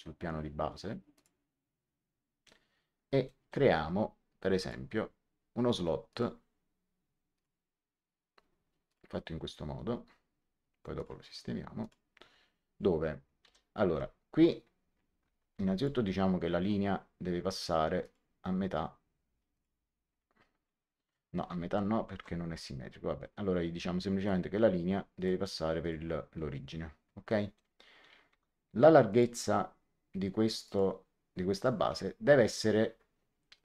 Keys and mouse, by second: 1.1 click, 3.2 middle click, 4.5 click, 6.0 click, 7.3 click, 8.8 click, 10.9 click, 13.4 l, 15.4 Escape, 15.7 click, 17.9 click, 19.5 click, 21.3 ctrl+z, 22.0 ctrl+z, 24.1 click, 27.2 middle click, 28.2 d, 29.0 click, 30.5 click.